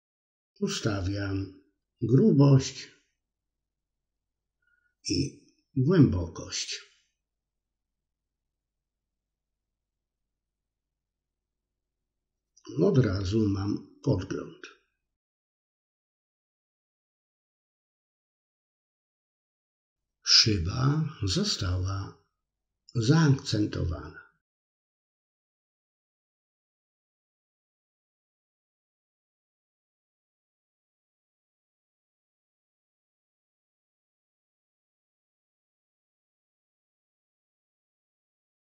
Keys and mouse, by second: 1.5-8.5 drag, 10.4-15.4 drag, 16.2-17.7 middle drag, 18.3-20.7 middle drag, 22.0-27.0 drag, 23.7 BackSpace, 23.9 BackSpace, 35.6-38.7 drag, 36.8 BackSpace, 37.0 BackSpace.